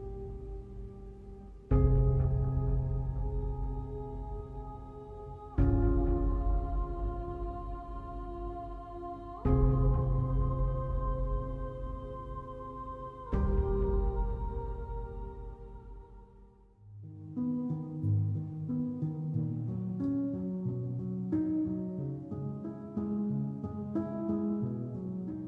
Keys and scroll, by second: 0.9 space, 1.8 space, 4.1 alt+space, 7.9 space, 8.9 alt+space, 13.4 space, 15.2 alt+space, 16.1 space.